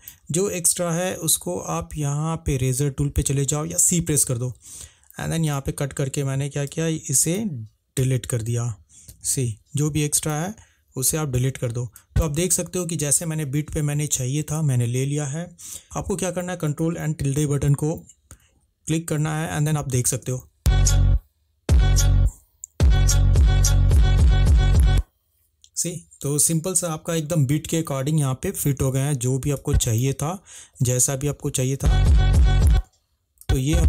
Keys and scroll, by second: 6.8 v, 8.1 Delete, 9.2 -, 11.0 Delete, 18.5 ctrl+`, 28.3 Escape, 30.8 -, 30.9 =, 31.0 =, 31.9 space.